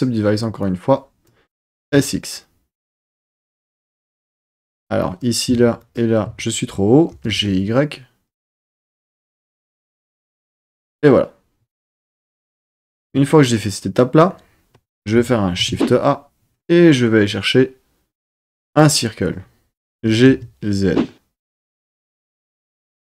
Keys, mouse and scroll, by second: 0.6 click, 1.7 s, 1.8 x, 4.3 click, 5.0 click, 5.8 shift+click, 7.1 g, 7.3 y, 10.5 click, 13.0 Tab, 15.6 shift+a, 19.9 g, 20.3 z, 21.4 click.